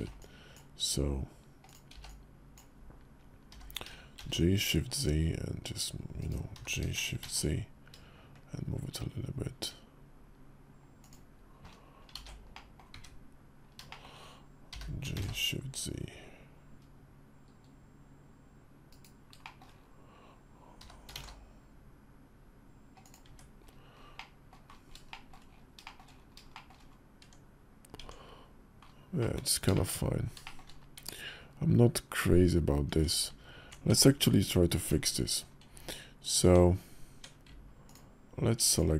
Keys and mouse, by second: 1.4 click, 1.7 b, 3.2 g, 11.9 ctrl+z, 12.3 click, 13.7 shift+middle click, 14.4 g, 19.2 shift+middle click, 20.6 g, 23.0 Tab, 23.9-24.3 drag, 24.8 shift+middle drag, 25.6 shift+click, 26.3 shift+drag, 27.0 Tab, 27.7 Tab, 28.9 click, 29.5 shift+click, 30.2 shift+click, 30.7 Tab, 32.6 Tab, 32.8-35.1 alt+drag, 33.6 Tab, 34.5 Tab, 36.3 Tab, 38.4 alt+click.